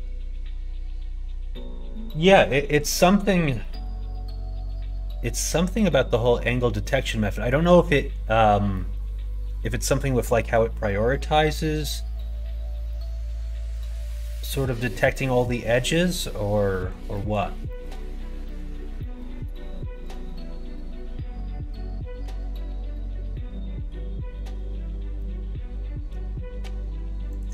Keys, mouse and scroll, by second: 3.5 middle click, 5.5 scroll up 1, 5.6 middle click, 5.7 scroll down 1, 7.5 scroll up 1, 7.6 middle click, 7.8 scroll down 1, 8.7 middle click, 8.9-10.3 scroll down 1, 10.3 middle click, 10.5 scroll down 1, 10.5 middle click, 12.8 scroll up 1, 12.9 middle click, 13.7 scroll up 1, 13.7 middle click, 15.3-15.9 scroll up 2, 15.4 middle click, 15.9 middle click, 16.6 scroll up 1, 16.7 middle click, 16.8 scroll down 1, 17.1 scroll up 1, 17.1 middle click, 17.2 scroll down 1, 17.6 shift+middle click, 18.4 middle click, 19.0 middle click, 20.0 alt+click, 25.2 middle click, 26.6 2.